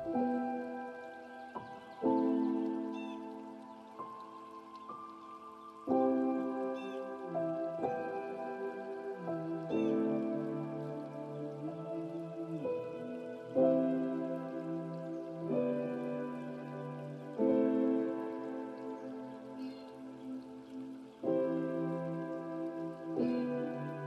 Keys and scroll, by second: 3.1 ctrl+a, 11.7 ctrl+a, 22.8 ctrl+space.